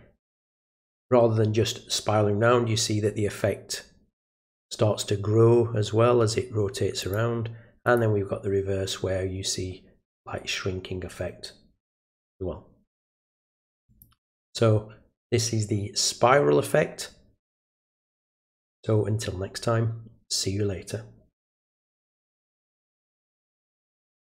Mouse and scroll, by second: 7.0 click, 7.8 click, 13.8 click, 24.2 click.